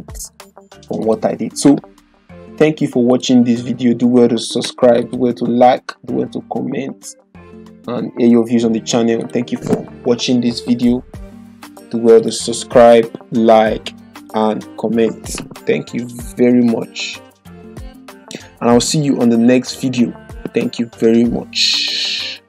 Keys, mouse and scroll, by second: 3.2 click, 7.4 typing, 9.9 click, 9.9 typing, 12.1 click, 13.6 typing, 15.8 ctrl+f, 16.6 ctrl+d, 17.8 click, 21.1 typing.